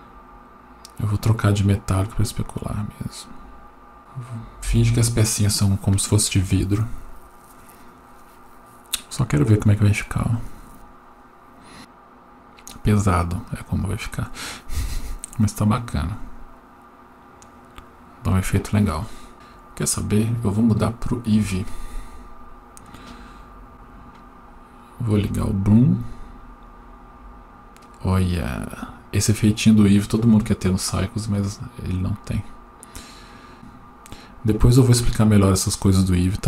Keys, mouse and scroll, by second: 1.4 click, 2.5-4.0 drag, 22.2 click, 23.2-23.7 scroll up 4, 23.7 click, 26.7 click, 28.2 click, 28.7 click, 29.2 click, 29.8 click, 30.5 click, 31.0 click, 31.4 click, 32.5 click, 33.0 click, 33.5-33.9 scroll down 8.